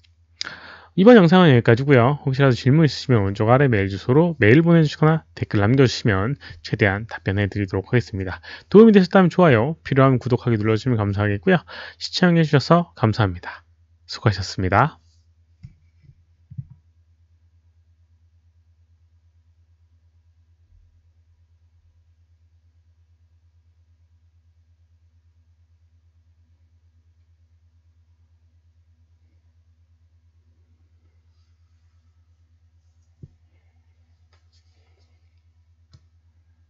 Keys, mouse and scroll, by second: 36.0 click.